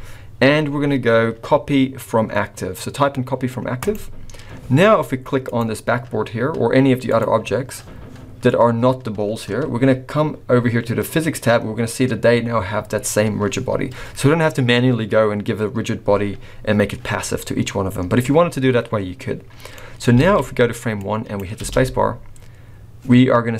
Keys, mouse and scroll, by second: 5.4 click, 7.1 click, 19.5-20.1 scroll down 2, 19.7 middle click, 20.3 alt+a, 21.3 click, 21.6 space.